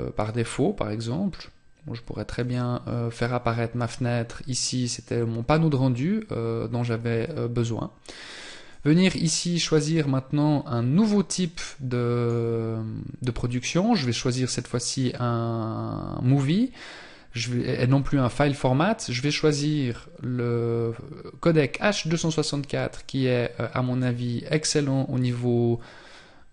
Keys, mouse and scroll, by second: 7.5 click, 12.3 click.